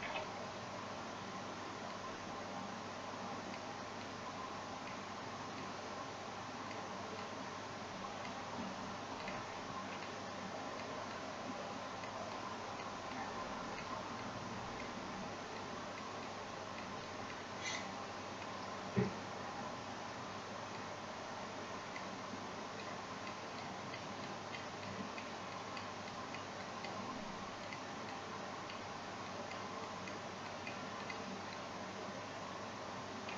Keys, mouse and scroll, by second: 6.0 typing, 7.6 typing, 13.2-33.3 drag.